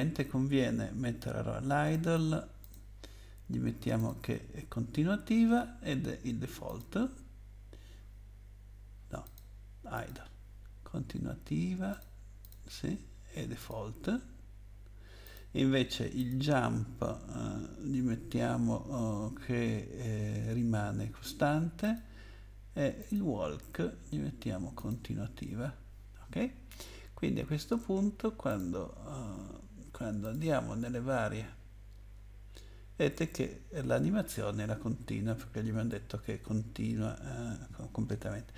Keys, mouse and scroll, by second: 1.9 click, 2.6 click, 2.7 click, 4.0 click, 6.7 click, 9.2 click, 9.9 click, 11.9 click, 12.4 click, 13.6 click, 15.2 click, 16.2 click, 21.8 click, 23.0 click, 24.8 click, 28.5 click, 30.2 click.